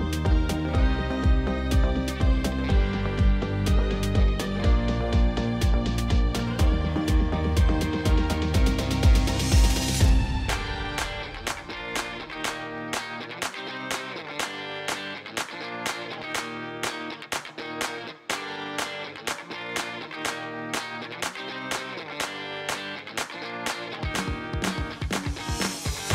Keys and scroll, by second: 1.7 shift+a, 3.0 b, 3.2 u, 3.3 m, 3.6 p, 4.1 Return, 5.9 shift+a, 8.1 n, 8.2 o, 8.4 i, 18.5 ., 18.8 1, 19.2 Return, 23.0 1, 23.2 5, 23.4 0, 23.5 Return.